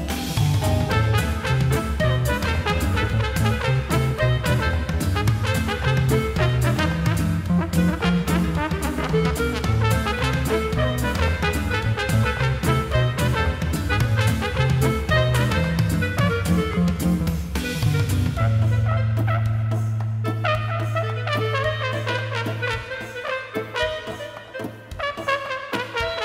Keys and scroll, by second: 0.0-0.5 scroll, 2.5 scroll, 3.0 scroll, 6.7 scroll, 7.4 scroll, 8.0-8.8 scroll, 9.2-9.9 scroll, 15.7 scroll, 16.4-17.3 scroll, 20.4 scroll, 21.0-21.6 scroll, 22.0 scroll, 25.6 space.